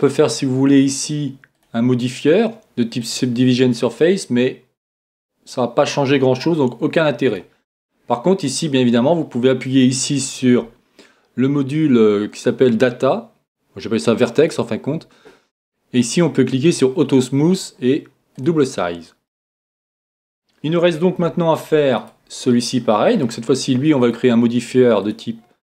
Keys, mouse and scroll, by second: 1.5-3.5 drag, 5.0-6.8 drag, 7.2-9.0 drag, 8.1-14.4 middle drag, 14.4-16.2 drag, 16.6-20.3 drag, 19.3-22.9 middle drag, 22.0-24.0 right drag, 24.0-25.6 drag.